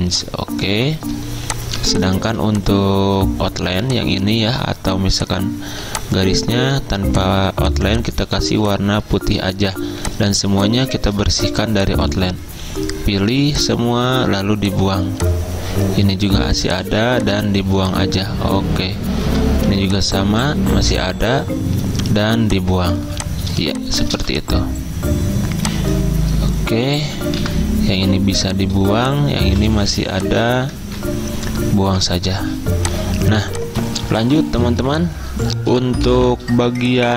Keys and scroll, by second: 8.5 z, 10.0 z, 12.4 v, 17.7 z, 19.3 v, 23.1 z, 24.1 v, 27.4 Delete, 28.0 z, 29.5 v, 30.9 ctrl+z, 32.0 Delete, 32.4 z.